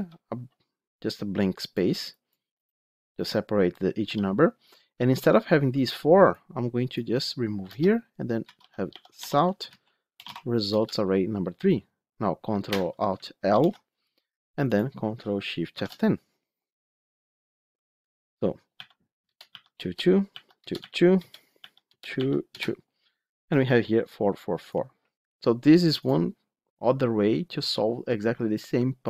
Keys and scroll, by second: 9.2 Tab, 10.6 Return, 13.3 Return, 13.5 ctrl+alt+l, 15.6 ctrl+shift+F10.